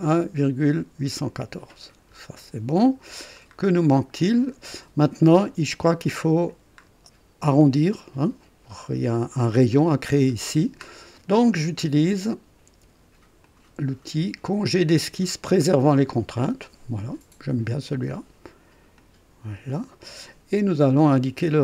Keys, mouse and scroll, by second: 1.7-2.0 scroll up 1, 2.3 right click, 3.0-3.4 scroll down 1, 3.9 scroll up 1, 4.6 right click, 6.8 scroll up 1, 9.3 click, 10.1 scroll up 1, 10.6 scroll down 1, 13.4 click, 15.8 click, 17.8 click, 18.9 click, 19.7 right click.